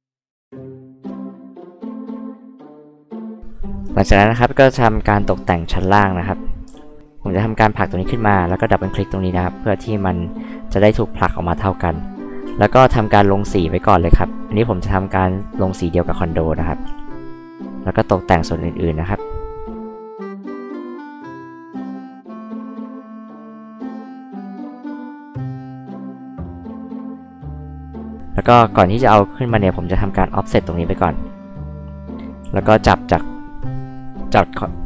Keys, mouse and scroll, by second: 0.4 click, 1.0 click, 1.4 click, 1.9 click, 2.5 click, 3.1 click, 4.1 space, 4.4 click, 6.7 p, 7.0 click, 9.5 click, 9.7 click, 12.4 space, 12.7 click, 12.9 click, 13.0 click, 14.3 click, 15.3 click, 16.9 space, 17.1 click, 17.7 click, 18.4 click, 18.7 click, 19.0 click, 19.5 click, 19.8 click, 20.0 click, 20.2 click, 20.3 click, 20.6 click, 20.8 click, 21.0 click, 21.2 click, 21.4 click, 21.6 click, 21.7 click, 21.9 click, 22.5 click, 23.1 click, 23.9 click, 24.2 click, 25.1 click, 25.7 click, 26.7 click, 27.0 click, 28.3 f, 29.1-31.0 drag, 32.4 m, 33.8 drag.